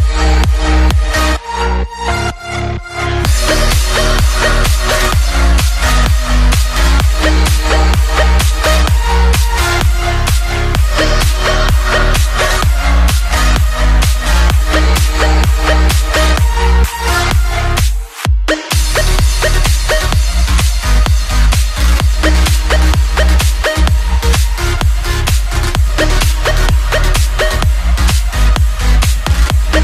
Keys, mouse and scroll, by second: 4.7 shift+z, 6.5 right click, 6.5 r, 7.4 g, 8.0-8.4 middle drag, 8.4 middle click, 9.0 middle drag, 9.2-10.2 middle drag, 10.2 KP_7, 10.5 r, 11.0 s, 11.7 KP_3, 15.3 g, 15.9 KP_7, 16.4 g, 19.2 shift+z, 25.6 shift+z, 29.6 shift+d.